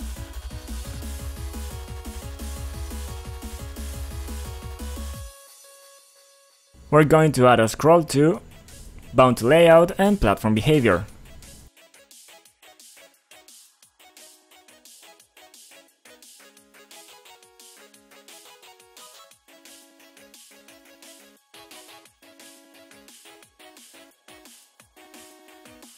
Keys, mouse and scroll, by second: 0.3 click, 0.6-3.5 typing, 2.6 click, 4.0 click, 4.4 click, 6.2 click, 6.8 click, 8.3 click, 8.7-10.3 scroll down 2, 12.0-12.5 scroll up 1, 12.5 scroll up 1, 14.3 click, 14.4 click, 15.5 click, 15.9-16.2 scroll up 3, 17.8-18.5 scroll up 2, 17.9 click, 18.0 click, 18.2 double click, 19.6 click, 20.6-22.4 scroll down 2, 22.5 click, 22.6 click, 22.6 click, 23.7 click, 25.3 click.